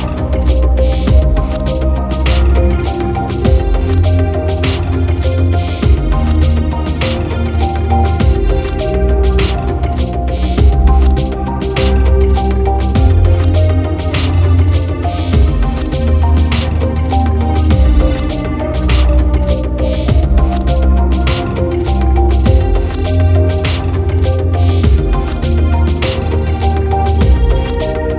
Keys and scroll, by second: 3.5 ctrl+=, 22.9 ctrl+alt+z, 26.4 ctrl+alt+z, 27.5 ctrl+-, 27.9 ctrl+0.